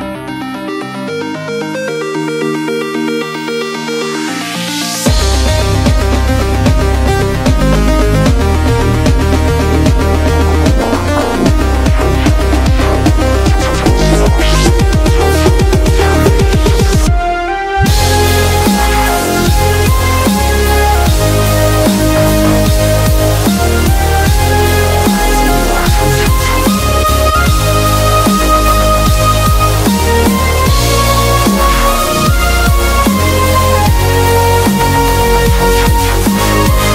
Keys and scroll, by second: 2.0-3.2 typing, 7.1-8.6 typing, 10.2 ], 11.1 ], 12.0 super+=, 12.1 super+=, 12.6-14.6 typing, 19.4-20.1 typing, 21.6-21.9 typing, 23.7 typing, 27.6 super+-, 27.8 super+-, 28.0 super+-, 28.9 super+-, 32.9 super+=, 33.0 super+=, 33.1 super+=, 34.7 super+=, 35.2-36.9 typing.